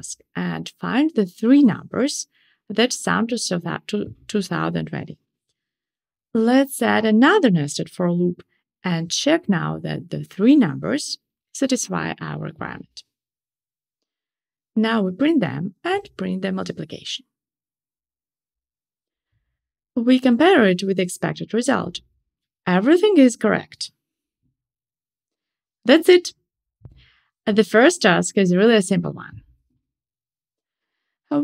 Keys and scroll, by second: 7.2 Tab, 10.2 shift+super+Up, 19.0 ctrl+shift+r.